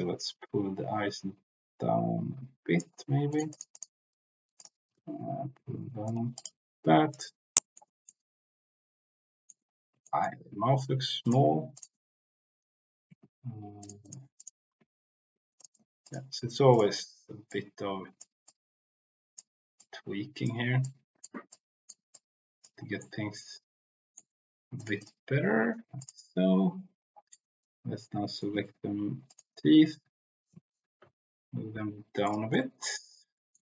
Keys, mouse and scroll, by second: 3.2 click, 4.5 click, 4.8 g, 4.9 z, 6.0 drag, 7.1 click, 7.5 middle click, 8.1-9.5 middle drag, 10.0 middle click, 11.2-11.8 drag, 13.1 Tab, 13.9 click, 14.7 Tab, 15.5 click, 16.0 click, 17.4 click, 17.7 t, 18.5 click, 19.7 click, 20.8 click, 21.5 click, 22.1 click, 23.0-24.1 middle drag, 24.7-25.0 drag, 27.2-28.4 middle drag, 29.3 shift+click, 29.8 z, 30.8 g, 31.0 z, 32.2 click, 32.5 middle click, 33.3 middle click.